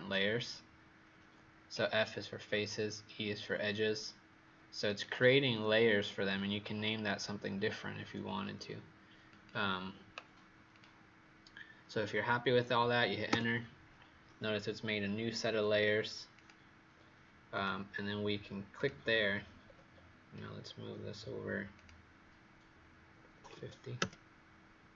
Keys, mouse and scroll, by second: 13.2 Return, 16.3 click, 19.6-20.6 scroll down 3, 20.6-21.7 scroll up 1, 21.7 click, 23.3 KP_5, 23.4 KP_0, 23.9 KP_Enter.